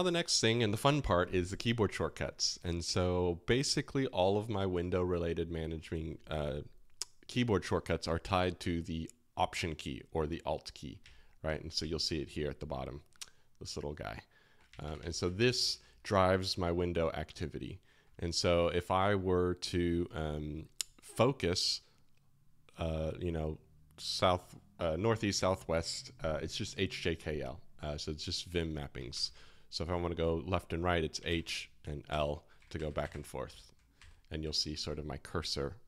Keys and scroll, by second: 29.1 super+n, 31.2 alt+h, 32.1 alt+l, 32.5 alt+h, 32.7 alt+l, 32.8 alt+h, 33.0 alt+l, 33.1 alt+h, 33.6 alt+h, 33.9 alt+l, 34.4 alt+h.